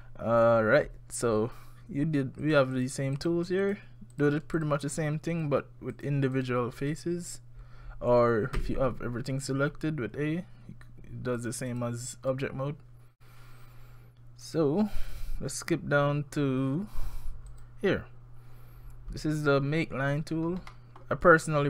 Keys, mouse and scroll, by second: 0.0 middle click, 0.0 scroll down 1, 0.3-0.8 scroll down 3, 2.4 click, 2.7 click, 3.2 click, 3.6 click, 4.1 click, 4.6 click, 5.3 click, 5.9 click, 6.4 click, 6.8 click, 8.6 a, 11.4 click, 11.7 click, 14.5 click, 17.5 click, 19.7-20.3 scroll up 4, 20.3-20.7 scroll down 4, 20.7 middle click, 21.1-21.6 scroll up 3.